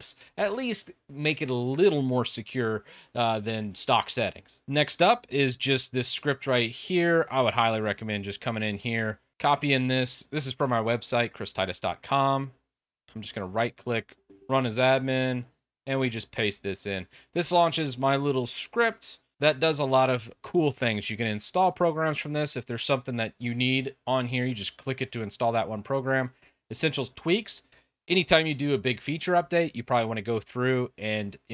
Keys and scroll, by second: 4.8 Down, 4.8 Return.